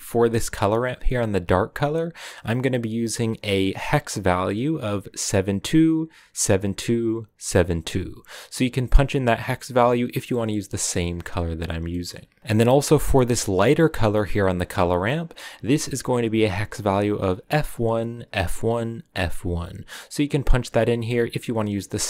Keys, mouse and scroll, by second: 12.4 ctrl+v, 20.7-22.0 drag.